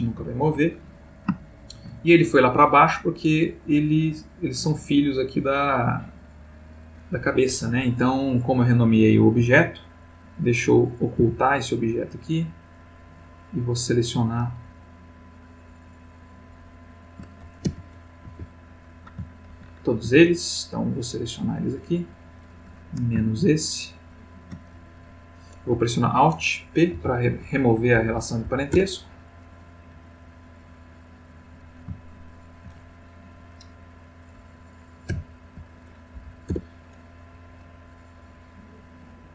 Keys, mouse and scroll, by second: 1.4-2.0 shift+middle drag, 5.0-7.5 drag, 7.2 Escape, 8.3 click, 9.3 x, 11.1 h, 13.1-14.2 drag, 14.8 click, 14.8 \, 15.9 click, 16.5-17.2 drag, 17.6 h, 18.3 F1, 19.5 ctrl+z, 20.6-22.0 drag, 23.6-24.3 ctrl+drag, 26.9 alt+p, 27.9 Down, 28.4 Up, 28.7 Return, 30.2-31.0 drag, 35.0 alt+p, 36.1 Down, 36.5 Return, 37.8 click.